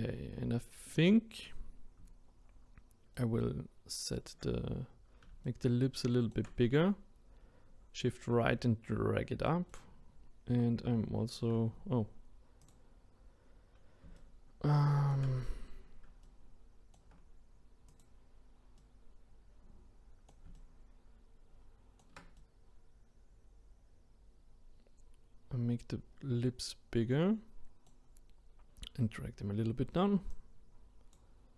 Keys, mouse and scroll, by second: 3.1-12.6 shift+right drag, 12.6-14.1 drag, 14.1-17.8 shift+right drag, 17.8 click, 18.8-30.3 right drag, 30.3-31.5 drag.